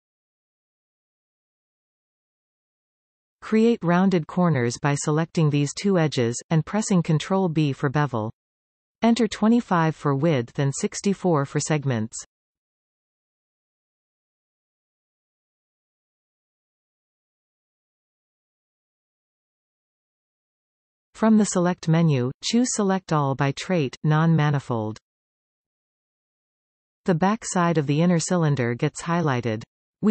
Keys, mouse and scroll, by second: 2.5 alt+a, 4.8 click, 6.0 shift+click, 7.0 ctrl+b, 9.7-12.8 drag, 14.5-21.4 middle drag, 21.4 alt+a, 22.6-25.7 drag, 26.8-27.1 scroll up 3, 27.1-28.3 middle drag, 28.3-28.8 scroll down 3, 28.8 z.